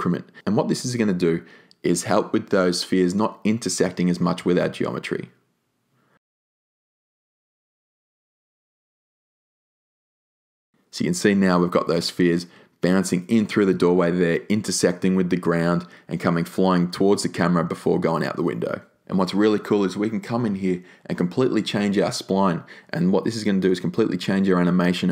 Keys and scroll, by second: 1.2 5, 1.5 Return.